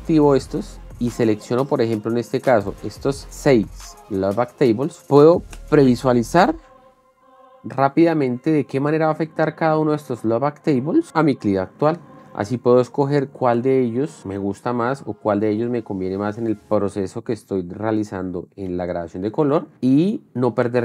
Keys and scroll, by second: 5.0 shift+f, 5.4 space.